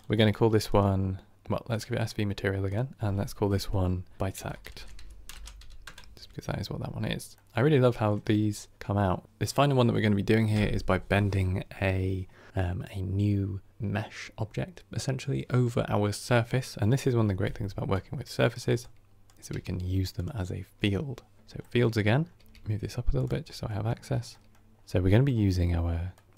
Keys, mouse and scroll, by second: 1.7-5.9 drag, 7.3-26.3 middle drag.